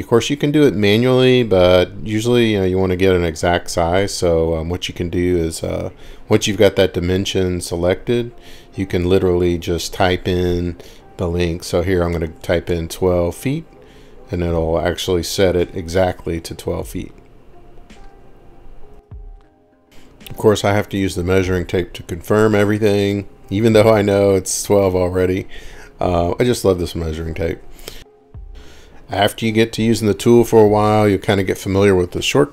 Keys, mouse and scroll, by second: 1.9 click, 3.1-3.5 scroll, 4.1 scroll down 5, 4.3 scroll up 5, 4.8-5.3 scroll down 4, 5.6 scroll up 1, 9.2 scroll, 11.3-12.6 typing, 12.7 Return, 15.0 typing, 16.3-21.3 drag, 22.3 click, 24.2-24.6 drag, 25.2-27.4 drag, 30.0-32.5 drag.